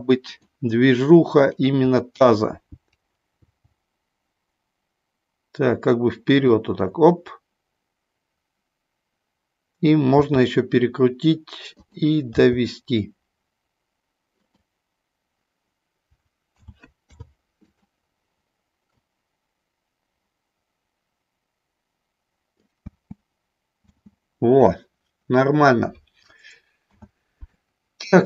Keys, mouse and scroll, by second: 1.4 shift+click, 3.4 g, 6.3 click, 10.1 r, 11.8 click, 12.3 g, 14.4 click, 16.7 a, 17.0 i, 19.0-22.7 drag, 22.9 space, 23.8 space, 26.9 a, 27.5-28.2 middle drag.